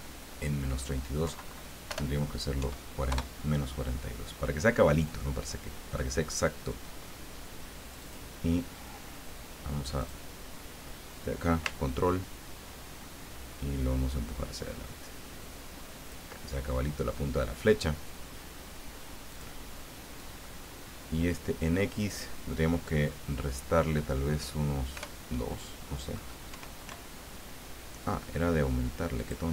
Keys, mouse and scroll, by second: 1.2 Left, 1.9 BackSpace, 2.6 KP_4, 3.1 KP_Enter, 7.8 click, 10.0 click, 11.8-16.6 ctrl+drag, 19.3 click, 22.1 click, 25.0 BackSpace, 26.5 KP_5, 26.8 KP_Enter, 29.2 click.